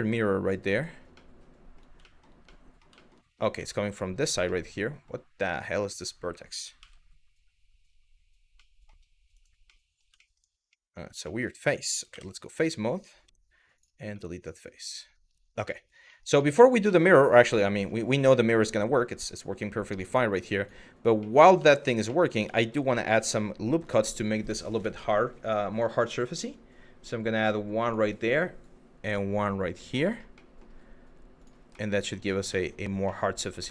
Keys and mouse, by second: 0.3 click, 0.8-1.4 middle drag, 1.7 shift+middle drag, 2.1-2.5 middle drag, 2.7 shift+middle click, 3.2 Tab, 3.7 shift+middle click, 4.2 middle click, 5.5 click, 6.4 g, 9.3 middle click, 9.9 shift+middle click, 10.3 middle click, 11.0 shift+middle click, 11.7 3, 12.1 click, 12.9 x, 13.8 middle click, 15.4 middle click, 15.8 middle click, 16.1 shift+middle click, 16.6 shift+middle click, 17.3 click, 18.2-19.2 middle drag, 20.2 click, 20.9 middle click, 21.4 shift+middle click, 21.7 middle click, 22.2 shift+middle click, 22.6 middle click, 23.1 shift+middle click, 25.1 click, 26.1 click, 28.2 click, 30.1 middle click, 31.0 click, 31.5 middle click, 32.3 shift+middle click, 32.8 middle click, 33.3 shift+middle click.